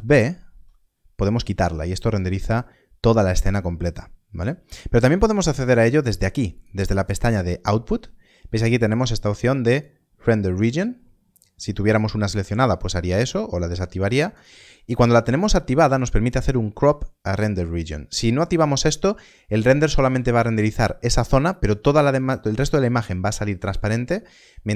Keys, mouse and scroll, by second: 0.1 ctrl+alt+b, 6.5 click, 9.7 click, 13.2 click.